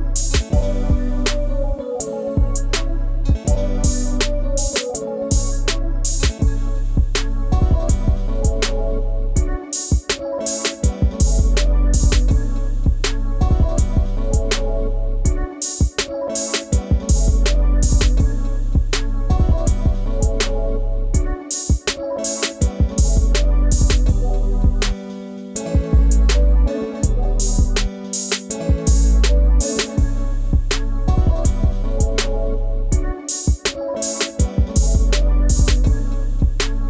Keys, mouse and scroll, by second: 15.8 double click.